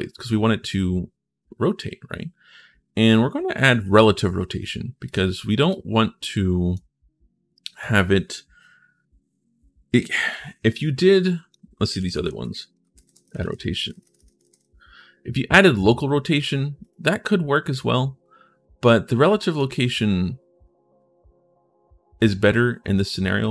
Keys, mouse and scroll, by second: 4.8 click, 5.5-6.5 drag, 11.0 click, 11.4-14.1 typing, 16.6 click, 17.5-18.6 drag, 19.0 click.